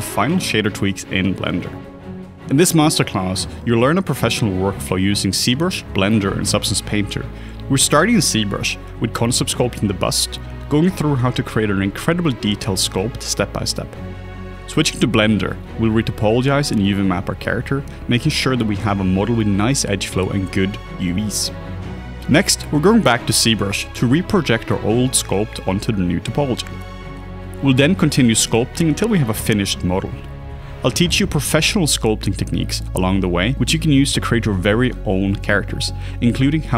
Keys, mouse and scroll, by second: 0.3 ctrl+z, 1.1 alt+right click, 1.2 double click, 1.5 s, 3.7 ctrl+z, 3.9 double click, 4.3 s, 4.4 double click, 5.8 double click, 6.5 s, 6.6 double click, 7.2 s, 7.6 double click, 7.9 double click, 8.4 s, 8.5 s, 8.6 ctrl+z, 10.5 double click, 13.5 s, 13.9 double click, 15.0 middle click, 15.3 e, 16.0 middle click, 16.0 e, 16.5 middle click, 16.7 e, 17.3 middle click, 17.5 shift+middle click, 17.5 shift+middle click, 17.8 e, 18.8 2, 18.8 e, 20.2 middle click, 20.8 ctrl+middle click, 21.1 ctrl+r, 21.1 ctrl+click, 21.3 right click, 21.6 middle click, 23.8 alt+right click, 25.7 alt+click, 26.4 right click, 26.4 alt+click, 27.0 right click, 27.0 alt+click, 27.1 alt+click, 27.2 alt+double click, 27.3 alt+click, 27.9 right click, 27.9 alt+click, 28.1 alt+click, 28.7 right click, 28.7 alt+click, 28.8 alt+click, 29.0 s, 29.1 double click, 31.2 s, 32.5 double click, 32.9 s, 33.7 double click, 33.9 double click, 34.2 alt+a, 35.7 right click.